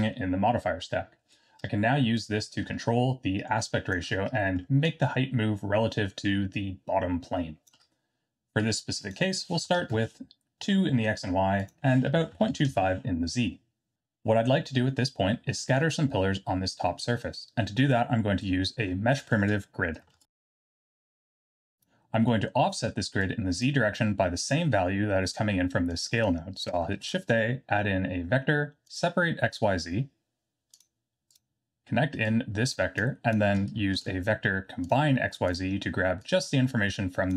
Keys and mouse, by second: 2.1-3.9 drag, 4.8-7.8 shift+drag, 8.7-10.6 drag, 11.5-13.5 drag, 19.2 middle click, 20.1 shift+a, 22.3 middle click, 23.2-23.6 drag, 25.9 click, 27.0 shift+a, 32.4 click, 33.1 click, 33.9 shift+a, 36.2-37.3 drag.